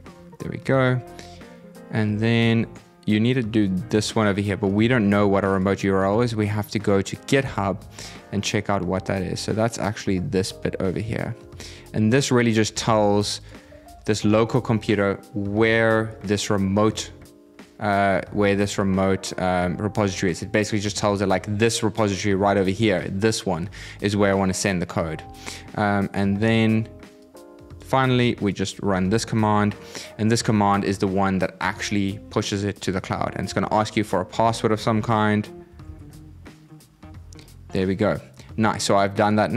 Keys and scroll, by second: 12.5 super+c, 13.6 super+v, 27.7 super+c, 28.6 super+v.